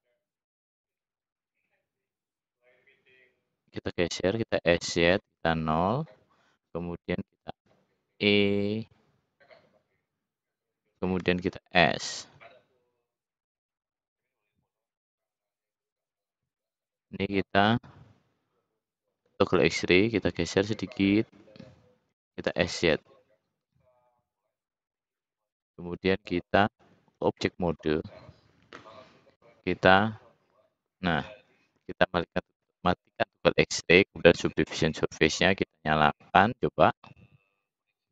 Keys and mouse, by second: 0.4 e, 2.7-3.8 drag, 4.5 s, 6.2 click, 7.3 e, 11.1 s, 12.9-14.3 drag, 14.8-15.9 drag, 22.1 s, 23.6 middle click, 37.1-37.6 middle drag.